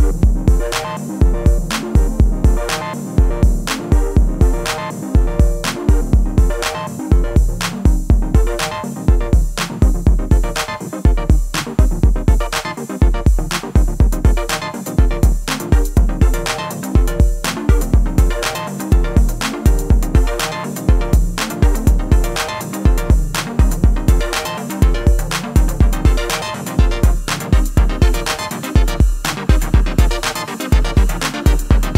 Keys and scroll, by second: 4.9 ctrl+r, 7.7 ctrl+b.